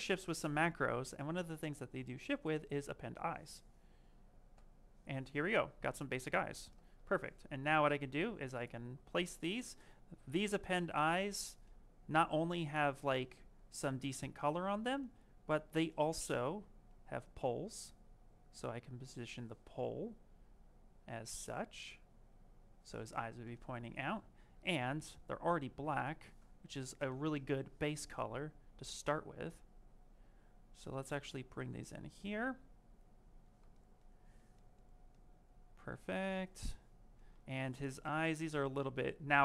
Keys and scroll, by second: 33.3 q.